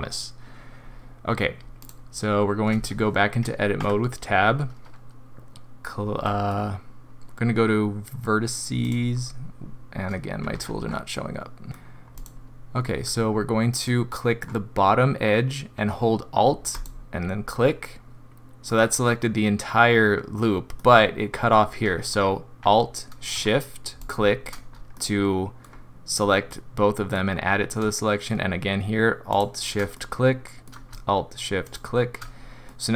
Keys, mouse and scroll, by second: 11.7 middle click, 11.7 scroll up 2, 11.7 n, 12.1 click, 13.3 scroll up 2, 13.9 middle click, 16.7 alt+click, 17.8 middle click, 20.3 middle click, 24.0 alt+shift+click, 24.7 scroll down 1, 24.9 middle click, 26.5 middle click, 29.3 alt+shift+click, 29.9 middle click, 30.6 middle click, 31.6 alt+shift+click, 32.7 middle click.